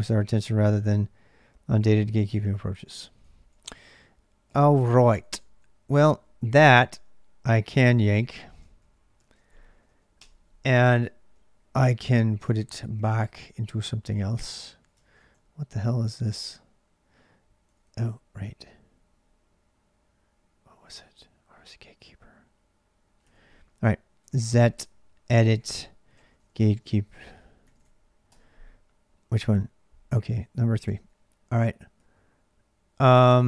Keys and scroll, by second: 0.0-33.4 typing, 7.7 ctrl+[, 7.8 ctrl+j, 10.5 ctrl+j, 14.8 ctrl+a, 15.0 ctrl+a, 28.1 Return, 30.7 Return.